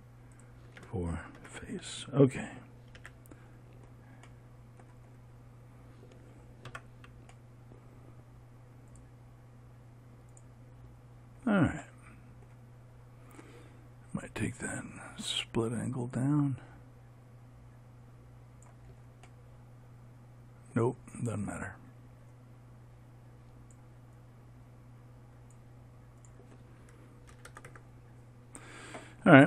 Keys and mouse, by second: 1.9-3.5 drag, 1.9 f, 3.5 a, 7.2 Tab, 11.0 click.